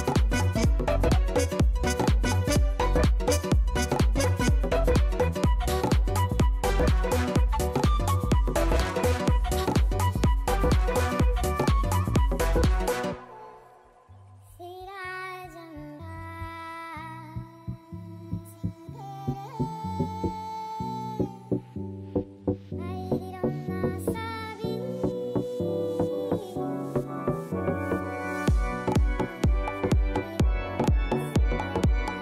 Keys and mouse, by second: 2.3 click, 3.9 alt+right click, 4.2 alt+middle click, 4.4 alt+click, 4.7 alt+right click, 4.9 alt+middle click, 5.2 alt+click, 5.9 alt+right click, 6.8 click, 9.4 click, 13.7 click, 14.3 alt+click, 17.2 click, 17.5 click, 19.7 click, 21.4 click, 26.9 click, 27.9 click, 28.4 click, 29.7 ctrl+z.